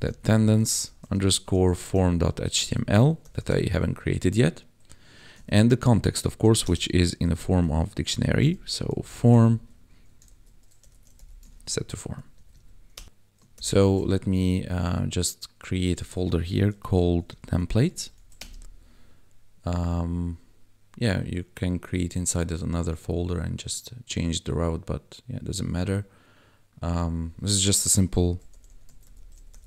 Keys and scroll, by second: 0.0-3.6 typing, 5.3 Right, 6.4 ,, 6.6 space, 7.2 shift+[, 8.4-11.2 typing, 9.8 Right, 11.5 ctrl+s, 11.9 Escape, 12.3 Right, 12.9 Return, 13.5 ctrl+b, 16.7-17.8 typing, 18.4 Return, 28.2-29.6 typing.